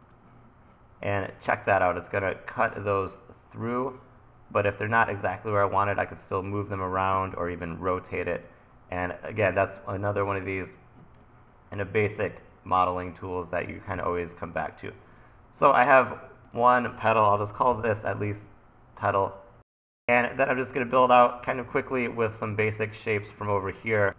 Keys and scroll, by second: 1.5 1, 7.4 r, 9.0 super+z, 14.0 e, 15.3 e, 17.1-18.2 typing, 21.0 1, 22.5 1.